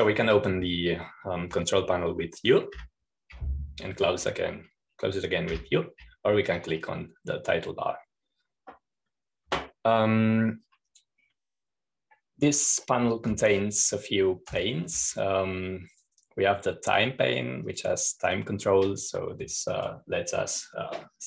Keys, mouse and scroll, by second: 0.0 click, 4.3 u, 7.1 u, 8.1-9.1 drag, 17.5 click, 19.2 click.